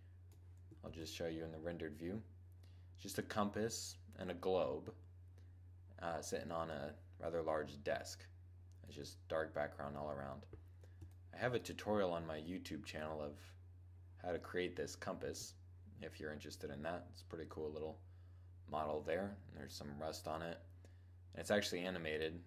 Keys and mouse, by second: 0.6 shift+z, 5.2 middle click, 7.2-7.9 middle drag, 8.0 middle click, 8.2 middle click, 8.7 click, 8.9 middle click, 9.3-10.9 middle drag, 21.2-22.4 drag.